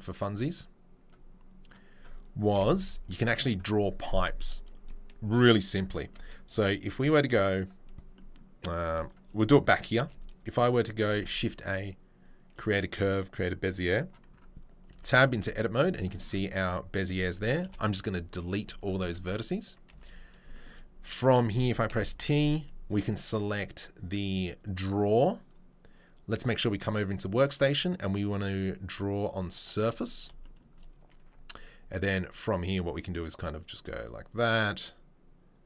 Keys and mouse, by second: 0.0-32.7 middle drag, 0.0 KP_7, 0.3 1, 9.0 click, 9.9 shift+a, 11.1 shift+a, 15.0 Tab, 15.2 z, 17.6 Delete, 19.9 z, 21.8 t, 24.6-29.3 drag, 24.6-29.3 right drag, 32.7-35.6 drag.